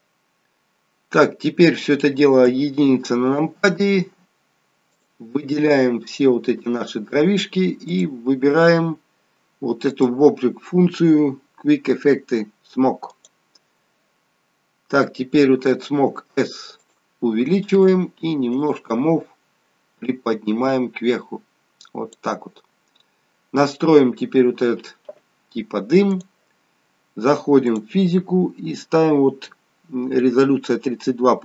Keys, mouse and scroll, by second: 1.0-2.4 scroll down 2, 2.4 KP_1, 4.9 click, 5.7 click, 8.7 click, 12.4 click, 15.9 s, 18.5 click, 20.0 click, 22.7 scroll down 2, 26.1 click, 27.6 click, 28.4-30.7 scroll down 2.